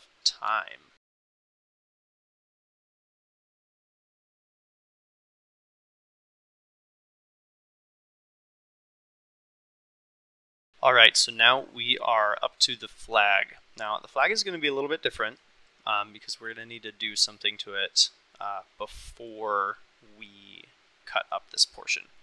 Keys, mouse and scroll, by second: 1.2 click, 1.4 KP_Divide, 1.5 Tab, 1.6 click, 1.7 ctrl+r, 2.3 ctrl+r, 2.8 3, 3.3 Delete, 3.4 Tab, 3.7 click, 3.7 middle click, 3.9 middle click, 4.3 middle click, 4.4 click, 4.5 middle click, 4.5 Tab, 4.6 ctrl+r, 5.0 ctrl+r, 5.4 3, 5.5 click, 5.7 Delete, 5.9 Tab, 6.1 Tab, 6.2 ctrl+r, 6.4 ctrl+r, 6.7 click, 6.9 3, 7.0 shift+click, 7.2 Delete, 7.4 Tab, 7.6 ctrl+click, 8.2 shift+middle click, 12.5-13.3 middle drag, 18.3 click, 19.1 click, 22.1 middle click.